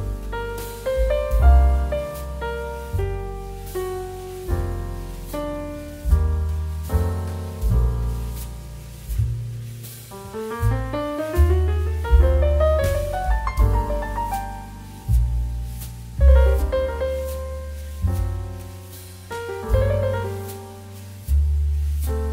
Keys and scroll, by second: 0.2 z, 12.0 space, 15.6 2, 16.7 space, 18.3 c, 20.1 z, 22.1 v.